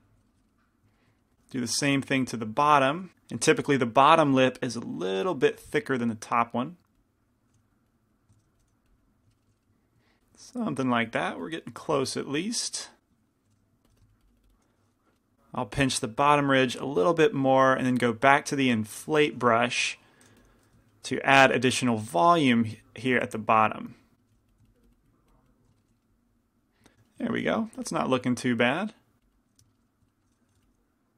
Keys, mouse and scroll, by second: 0.3 right click, 0.5-3.0 middle drag, 2.2 shift+c, 2.2 shift+f, 3.0 click, 3.1 ctrl+z, 4.5-9.8 drag, 7.6 f, 8.4 shift+f, 9.4 middle click, 10.8 middle click, 11.3-13.5 drag, 13.6 shift+f, 14.2-15.3 drag, 15.3 ctrl+z, 15.3 f, 16.3-20.5 drag, 18.6-20.5 middle drag, 20.5 i, 20.5 f, 20.8 middle click, 21.6 f, 24.4 f, 26.2 click, 26.2 middle click, 26.9 middle click, 27.9 f, 28.4 f, 29.0-30.1 drag, 30.6 g, 30.6 f.